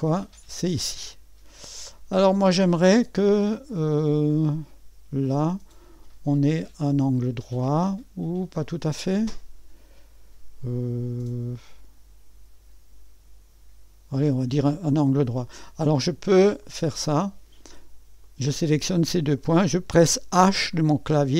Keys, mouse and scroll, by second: 16.6 click, 18.2 click.